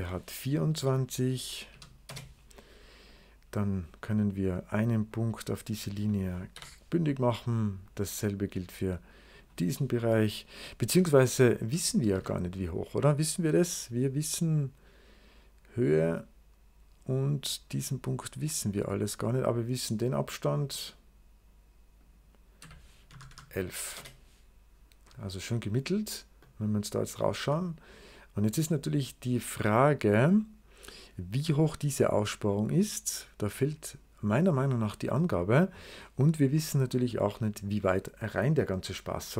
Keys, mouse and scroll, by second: 0.6 2, 1.6 4, 1.9 Return, 2.9 click, 4.3 click, 5.0 click, 5.6 click, 6.4 o, 7.7 click, 9.2 click, 12.0 Escape, 14.3-19.2 drag, 20.5 click, 21.9 click, 22.2-23.7 typing, 23.8 Return, 25.9-26.9 scroll down 1, 27.4 middle click, 28.3-30.8 drag, 32.6-33.5 scroll down 5, 33.5 scroll up 2, 34.0 scroll up 2, 36.9-38.7 drag.